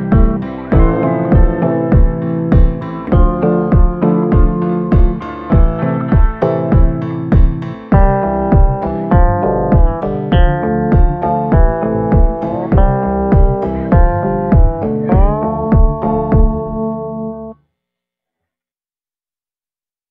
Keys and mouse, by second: 0.2 click, 1.0 click, 2.3-4.4 middle drag, 4.6-6.0 shift+middle drag, 6.3 shift+middle click, 7.6 shift+middle click, 8.8 ctrl+i, 9.5 b, 11.9 middle click, 12.7 shift+middle click, 13.4 b, 16.5 b, 17.2 b, 17.9 b, 19.5-20.1 middle drag.